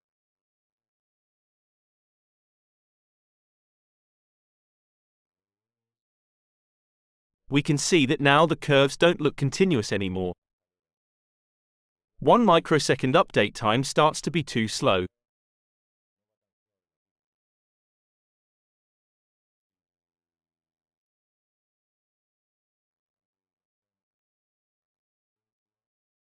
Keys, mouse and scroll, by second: 0.5 0, 1.3 Return, 3.2-4.8 drag, 5.6-10.0 drag, 20.5 click, 22.2 click, 23.3 click, 24.7 1, 25.2 0, 26.2 Return.